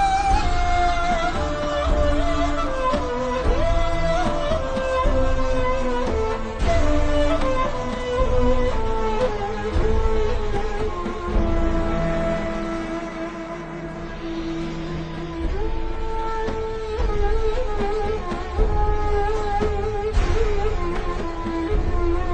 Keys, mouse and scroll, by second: 1.4 BackSpace, 2.3 click, 2.8 z, 3.5 scroll down 1, 4.1-4.5 scroll up 1, 4.5 click, 6.2 scroll up 1, 6.4 click, 7.8 scroll up 1, 9.8 click, 10.1 scroll down 1, 10.7 click, 11.2-11.5 alt+shift+scroll down 1, 12.0 alt+shift+scroll up 1, 12.8 scroll up 1, 13.0 v, 13.1 click, 13.7 alt+shift+scroll up 1, 14.3 n, 15.0-15.6 alt+shift+scroll up 3, 15.6 ctrl+scroll down 1, 16.9 click.